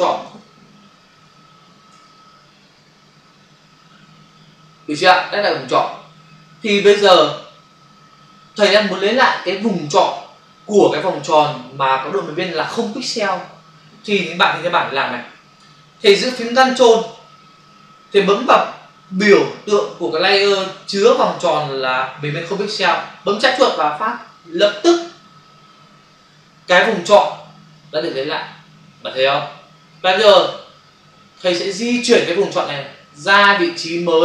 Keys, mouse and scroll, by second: 1.5 typing, 1.7 Return, 24.6 ctrl+click.